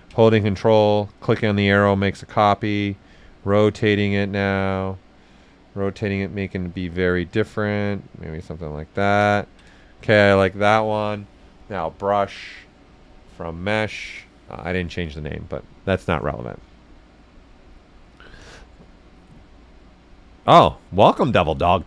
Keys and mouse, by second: 1.1 ctrl+click, 2.2 click, 3.2 right click, 4.3-5.7 drag, 5.7 click, 6.6 right click, 7.7 click, 8.6 q, 9.0 ctrl+click, 9.3 ctrl+right click, 11.7 click.